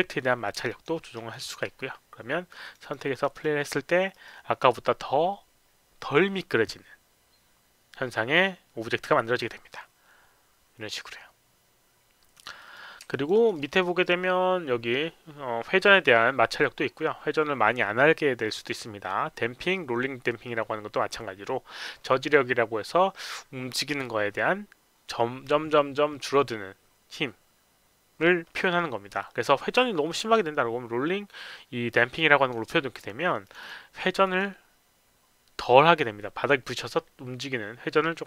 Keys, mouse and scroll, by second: 0.7 alt+click, 1.0 alt+middle click, 1.3 alt+click, 2.6 click, 2.8 click, 3.1 click, 3.3 click, 4.1 click, 12.6 click, 13.1 alt+click, 13.3 alt+right click, 32.2 click, 33.4 click, 33.6 click, 34.2 click.